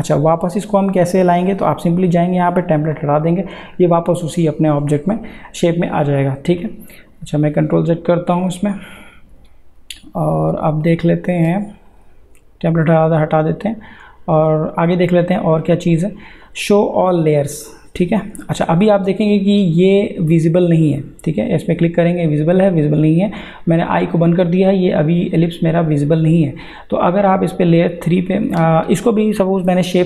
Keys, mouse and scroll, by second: 6.9 click, 7.3 ctrl+z, 11.9 click, 18.5 click, 27.3 click.